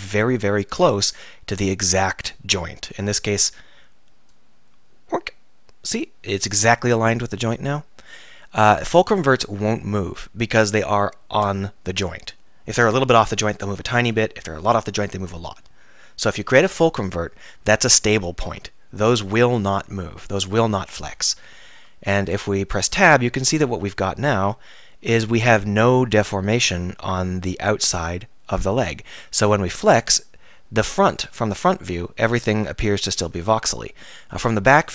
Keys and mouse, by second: 22.4 Tab, 24.3 r, 31.2-31.5 drag, 31.5-32.0 middle drag, 32.6-33.5 middle drag.